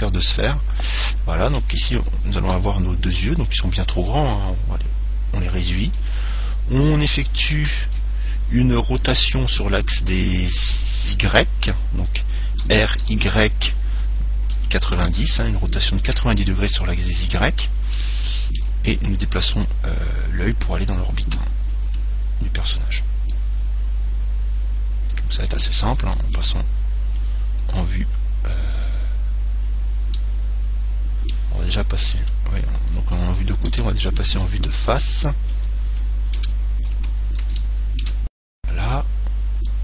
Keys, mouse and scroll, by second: 1.1-4.6 middle drag, 4.2 s, 6.2 click, 7.9-8.9 middle drag, 8.0 KP_Decimal, 12.9 r, 17.4-19.9 middle drag, 19.7 click, 22.1 z, 23.6 click, 26.4 KP_1, 27.9-30.0 middle drag, 30.3-32.1 middle drag, 32.4 KP_1, 33.9 KP_3, 35.2-36.6 scroll up 1, 36.6-37.5 scroll up 1, 36.6 KP_5, 37.8-39.8 middle drag.